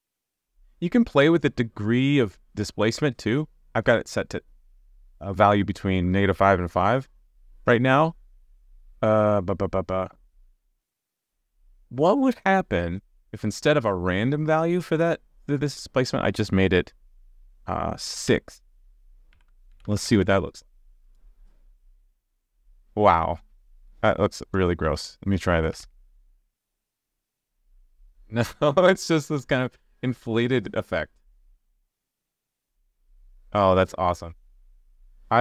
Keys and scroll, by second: 20.1 super+s, 25.9 super+s.